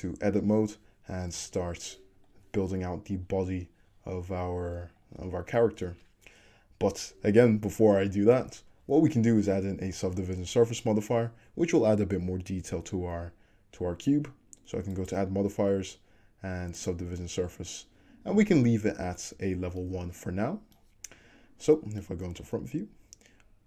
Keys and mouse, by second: 1.5 a, 3.1-4.5 middle drag, 4.5-22.6 drag, 4.8 middle click, 4.9-15.0 right drag.